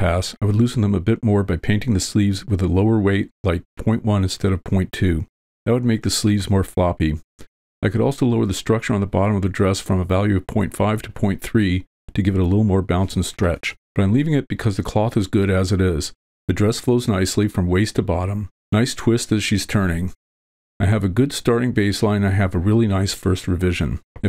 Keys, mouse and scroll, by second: 0.2-1.4 drag, 3.0 click, 12.5 click, 15.8-16.8 drag.